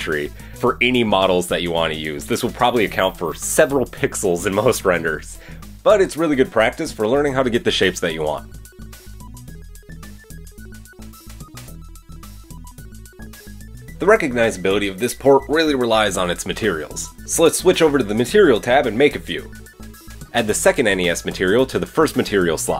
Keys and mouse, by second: 4.7 ctrl+b, 7.3-7.7 alt+drag, 8.1-8.5 alt+drag, 9.1 ctrl+b, 11.4 alt+click, 13.0 ctrl+b, 14.8 Tab, 15.2-18.0 middle drag, 16.6 Tab, 16.9 a, 18.0-18.6 drag, 20.2-21.0 middle drag.